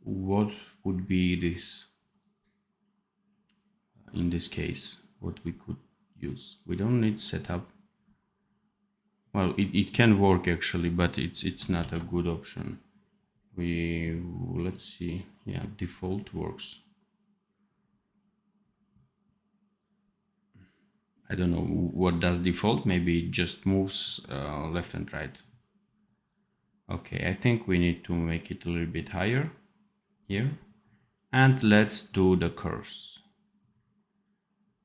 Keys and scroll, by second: 11.7 ctrl+z.